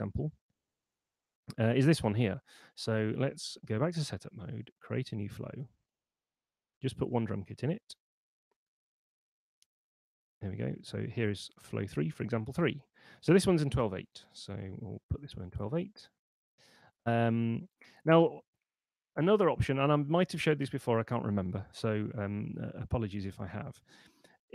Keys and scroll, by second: 3.8 super+1, 9.0 super+2, 14.0-15.5 typing.